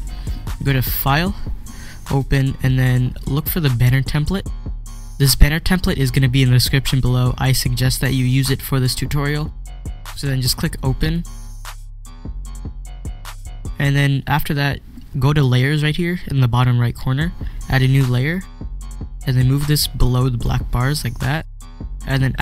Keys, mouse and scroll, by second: 11.0 click, 11.1 click, 18.2 click, 18.5 click, 20.3-22.4 drag.